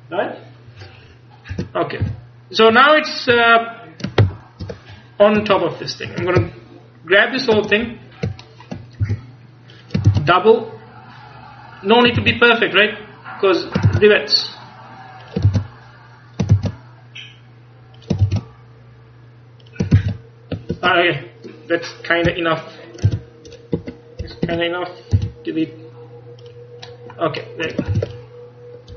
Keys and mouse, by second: 1.6 Tab, 2.1 a, 3.4 KP_1, 4.3 ctrl+KP_1, 6.5-7.6 ctrl+KP_Add, 9.1 g, 9.9 click, 10.2 shift+d, 12.2 shift+d, 14.0 shift+d, 15.6 shift+d, 16.6 shift+d, 18.3 shift+d, 20.0 shift+d, 23.1 c, 25.2 x, 28.0 ctrl+s.